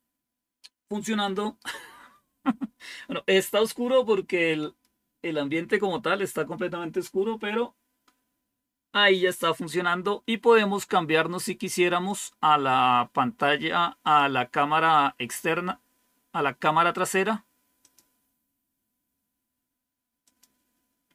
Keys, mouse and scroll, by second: 12.0 click, 12.5 click, 13.9 click, 17.7 click, 18.2 click, 20.1 click.